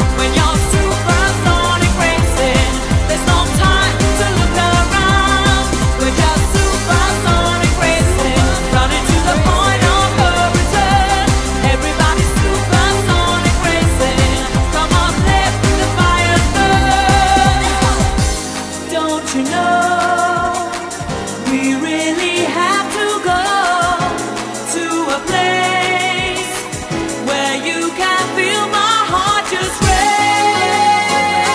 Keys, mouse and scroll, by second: 11.7 right click, 11.9 click, 17.6 scroll, 18.9 middle click, 19.4 scroll, 19.9 middle click, 21.1-21.7 scroll, 22.3 middle click, 26.2 scroll, 29.1 right click.